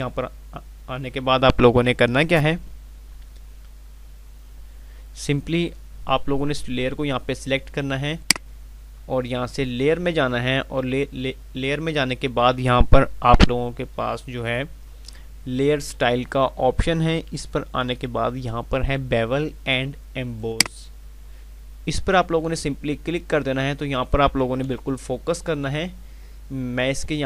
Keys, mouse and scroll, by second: 8.1 click, 20.4 click.